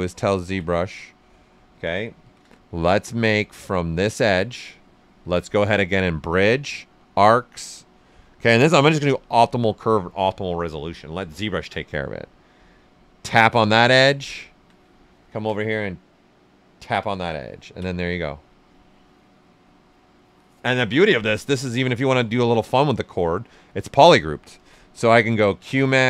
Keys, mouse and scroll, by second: 0.2 ctrl+right click, 2.2 shift+d, 3.9 space, 8.6 click, 10.3 space, 11.2 space, 13.2 click, 13.8 ctrl+right click, 15.0-16.7 ctrl+right drag, 16.7 click, 17.3 ctrl+right click, 18.5 right click, 22.0-23.6 ctrl+right drag, 24.5 space.